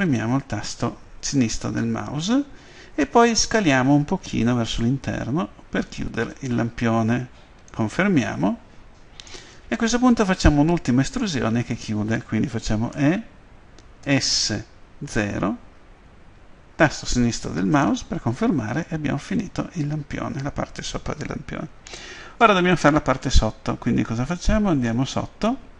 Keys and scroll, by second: 4.6 s, 14.0 s, 15.2 0.